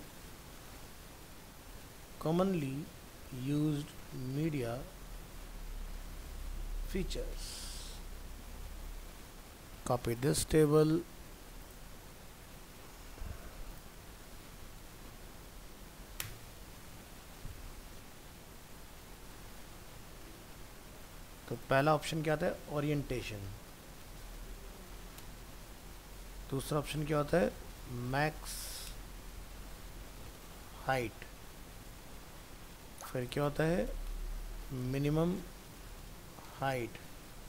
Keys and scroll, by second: 7.7 ctrl+s, 12.7 ctrl+c, 16.6 ctrl+v.